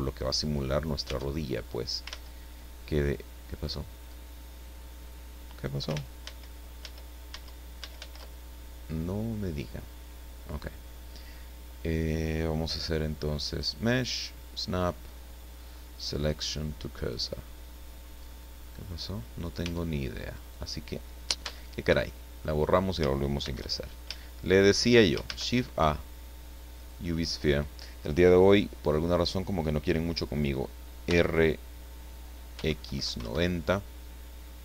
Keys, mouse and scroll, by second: 1.0 Tab, 2.0 ctrl+z, 3.3-3.6 scroll down 2, 4.0 scroll up 2, 6.2 ctrl+shift+z, 13.5 click, 16.3 click, 17.4-17.8 scroll down 1, 18.1-18.7 scroll up 1, 19.0 scroll down 2, 19.6 Tab, 20.3 right click, 21.4 x, 22.0 click, 23.4 shift+c, 24.2 shift+middle click, 25.1 shift+scroll up 2, 25.3 shift+a, 26.7 click, 31.0 r, 32.5 x, 32.8 KP_9, 33.0 KP_0, 33.2 KP_Enter.